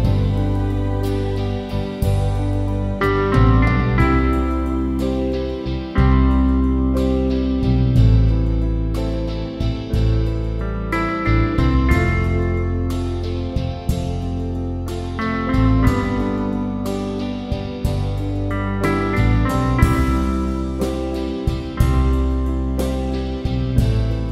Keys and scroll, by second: 2.7 Return, 11.2 shift+f, 13.0 shift+c, 13.7 shift+b, 15.7 Return, 17.7 BackSpace.